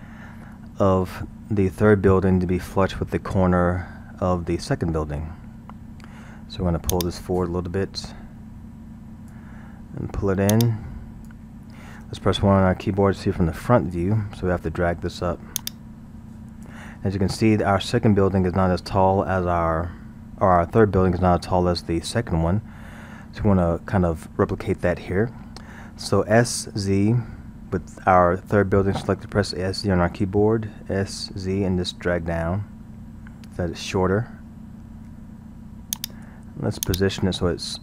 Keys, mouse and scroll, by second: 0.6-2.0 scroll, 6.9-10.0 drag, 10.6-13.1 drag, 13.1 KP_1, 14.3 scroll, 15.6-17.1 drag, 17.1-18.0 scroll, 22.8-23.3 scroll, 31.1 s, 36.9 click.